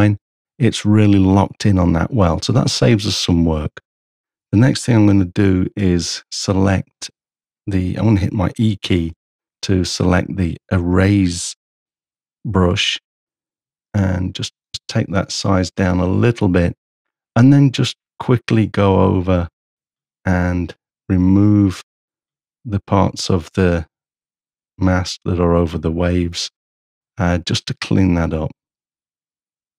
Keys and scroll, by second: 5.1 b, 14.1 shift+[, 14.7 shift+], 14.8 [.